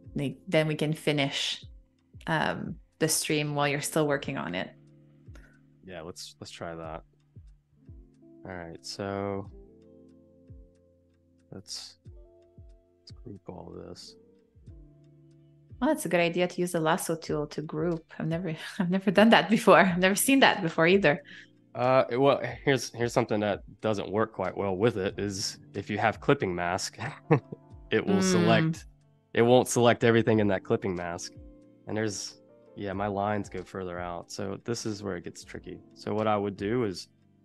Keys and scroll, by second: 1.5 v, 2.2 super+-, 3.1 space, 5.2 BackSpace, 10.4 super+z, 11.6 q, 17.2 space, 18.1 v, 19.4 super+=, 19.8 space, 31.6 super+y, 33.9 super+y, 34.8 v.